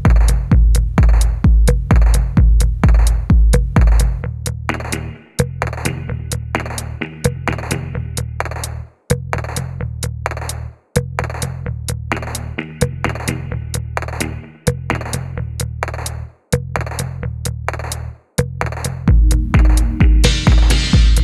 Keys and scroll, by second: 0.0-2.2 typing, 4.9 typing, 7.2 typing, 8.5 typing, 10.3-11.1 typing, 12.2-12.6 typing, 14.0 typing, 15.2-16.0 typing, 17.5 typing, 18.5-20.3 typing.